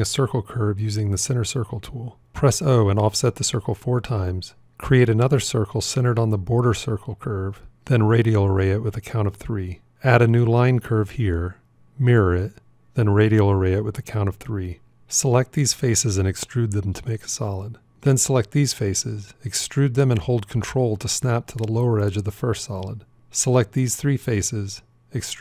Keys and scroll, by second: 2.1 o, 4.7 shift+c, 9.9 shift+a, 11.7 alt+x.